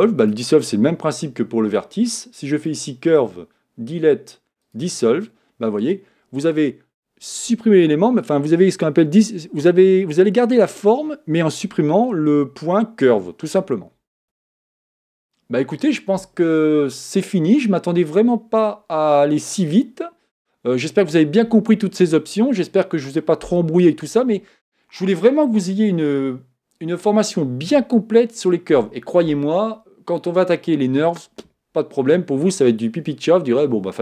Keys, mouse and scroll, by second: 0.2 click, 2.7-5.7 drag.